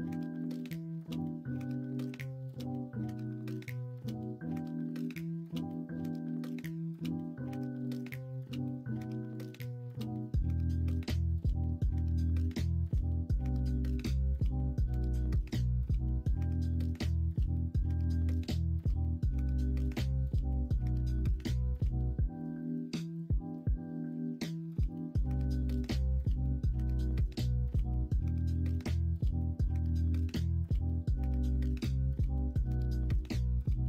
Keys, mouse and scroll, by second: 2.0 ctrl+r, 5.5 3, 6.1 middle click, 12.0 0, 13.1 shift+middle click, 18.1 ctrl+z, 18.8 o, 20.8-23.1 drag, 23.7 middle click, 24.4 middle click, 25.0 ctrl+z, 26.4 middle click, 27.2 2, 28.5 3, 30.4 h, 31.6 middle click, 32.2 middle click.